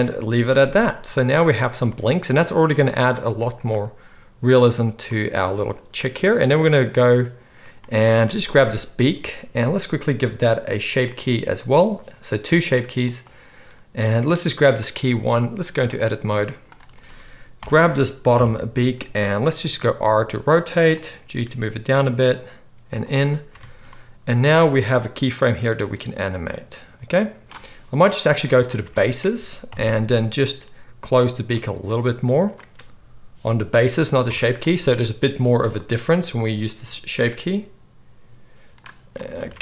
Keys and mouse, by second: 1.1 space, 2.2 space, 5.4 space, 13.0 middle click, 13.2-16.6 drag, 16.6-25.3 middle drag, 17.5 ctrl+l, 18.2 KP_3, 19.5 r, 21.1 g, 23.4 Tab, 25.3-28.4 drag, 28.4-35.5 middle drag, 28.7 Tab, 29.6 KP_3, 30.6 r, 31.7 g, 34.2 Tab, 35.5 click, 35.6-36.4 middle drag, 36.4-39.6 drag, 39.3 Tab.